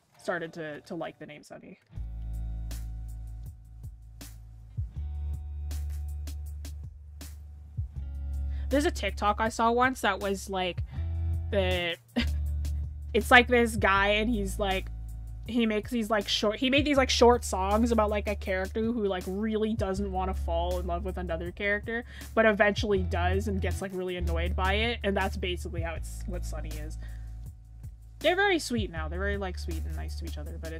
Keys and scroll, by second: 11.1-11.6 scroll down 1, 12.5-13.0 scroll up 1, 13.7 scroll up 1, 16.3-17.1 scroll down 1, 18.5-18.9 scroll, 19.3 scroll, 28.2 scroll.